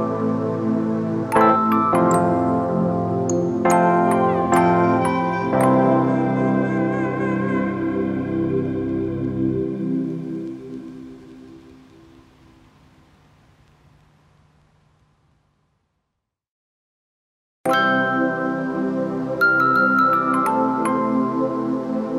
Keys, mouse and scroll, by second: 4.5 alt+shift+click, 18.5 ctrl+d.